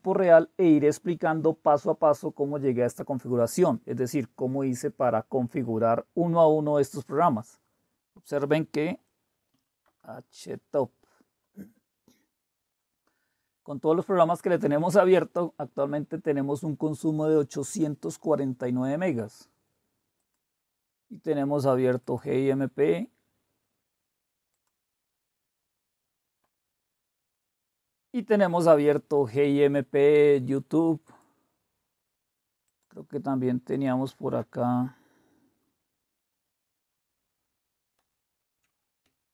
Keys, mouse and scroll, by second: 9.5 typing, 9.8 Return, 20.2-22.2 drag, 24.5 click, 31.0 click, 32.7 click, 33.7-38.0 drag, 38.0 super+8.